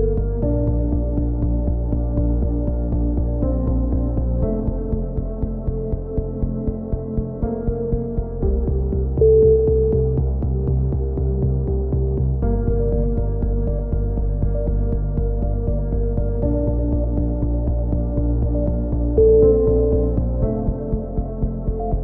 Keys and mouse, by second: 1.1 a, 2.0 click, 2.2 c, 3.4-4.4 drag, 4.4 middle click, 5.3 click, 8.0 click, 8.2 c, 9.1-10.1 drag, 9.3 right click, 11.1 a, 11.5 click, 13.6 click, 17.5 ctrl+r, 18.8 click, 19.1 a, 19.4 c, 20.3-21.5 drag.